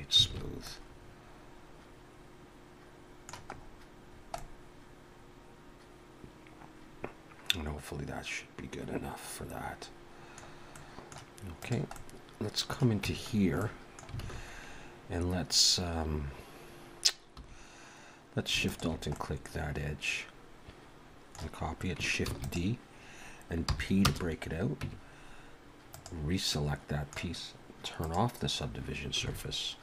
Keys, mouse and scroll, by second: 0.3 alt+a, 0.4-0.9 scroll up 2, 0.7 middle click, 3.5-4.0 scroll up 2, 4.0-4.4 scroll down 3, 4.3 middle click, 10.7 middle click, 11.6 click, 11.9 middle click, 13.0 Tab, 13.3 scroll up 3, 13.6 middle click, 14.2 alt+a, 17.4 2, 18.6 alt+shift+click, 19.1 middle click, 22.3 shift+d, 23.7 p, 24.8 Tab, 25.9 click, 26.5 middle click, 28.0 click, 29.2 s.